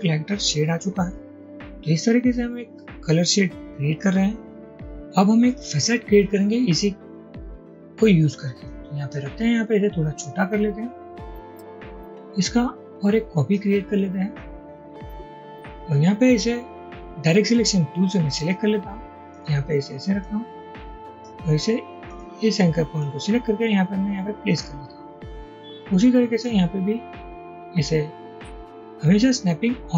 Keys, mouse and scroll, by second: 8.7 click, 10.3-11.6 drag, 27.0-29.9 drag.